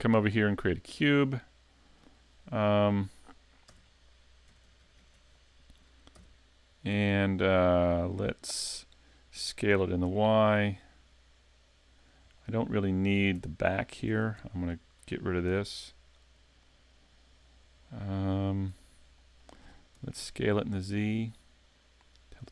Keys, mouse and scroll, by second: 0.7 click, 2.2 middle click, 6.2 KP_Decimal, 6.8-7.3 scroll down 6, 7.7 middle click, 9.7 s, 12.1 click, 12.4 middle click, 13.4 Tab, 14.1 ctrl+Tab, 14.7 right click, 15.5 x, 16.7 middle click, 17.8-18.1 scroll down 2, 18.8 Tab, 19.2 middle click, 20.0 s.